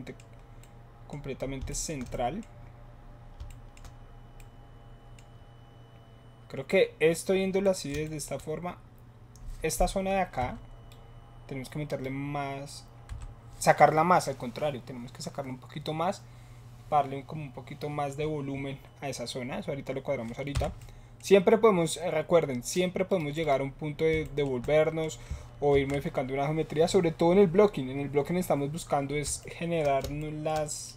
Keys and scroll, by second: 10.4 7, 13.1 7, 20.5 Tab, 25.7 ctrl+s.